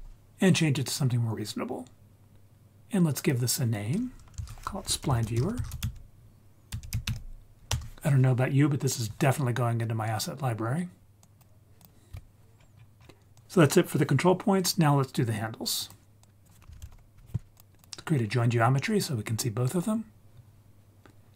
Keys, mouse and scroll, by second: 3.2-7.7 drag, 11.2 click, 11.8 click, 12.1 Tab, 12.6-13.3 scroll down 5, 13.0 scroll up 2, 13.3 click, 13.4 ctrl+z, 15.8 click, 16.2 drag, 16.7 shift+a.